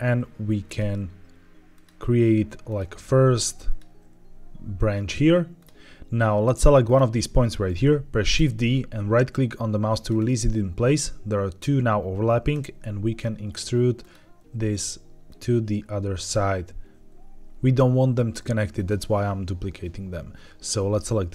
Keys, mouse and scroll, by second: 0.6 click, 0.8 e, 1.6 click, 1.8 e, 2.6 click, 2.8 e, 3.6 click, 3.8 e, 5.5 click, 6.7 click, 8.3 shift+d, 10.0-11.3 right drag, 12.4 e, 13.9 click, 14.3 e, 15.2 click, 15.5 e, 16.1 click, 16.7 e, 18.7 click, 20.8 click.